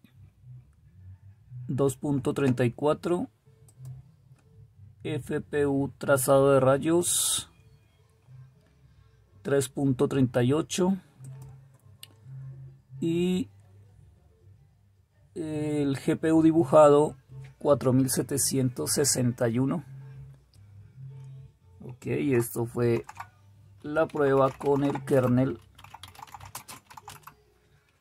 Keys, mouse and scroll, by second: 22.9 super+q, 24.9-27.4 typing, 25.2 Return.